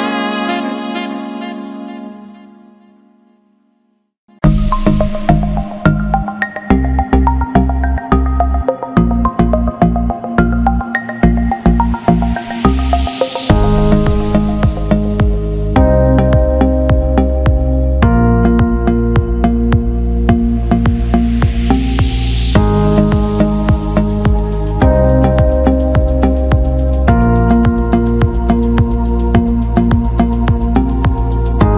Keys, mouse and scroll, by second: 2.4-3.4 drag, 4.0 alt+middle click, 5.1-6.9 drag, 7.1-9.1 alt+middle drag, 12.5 Tab, 14.4 a, 15.4 Tab, 18.2 a, 20.2 l, 21.5 click, 22.4 click, 23.7 click, 24.5 alt+middle click, 25.2 alt+middle click, 26.3 alt+middle click, 26.5 click, 31.1 click.